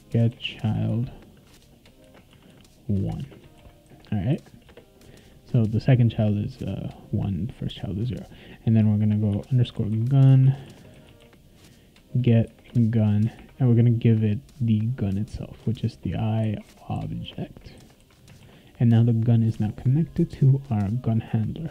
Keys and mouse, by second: 0.0-3.2 typing, 3.5 ctrl+s, 4.7 Return, 9.0-11.7 typing, 12.7 Return, 13.3 shift+9, 15.8-18.0 typing, 18.4 ctrl+s, 20.6 click.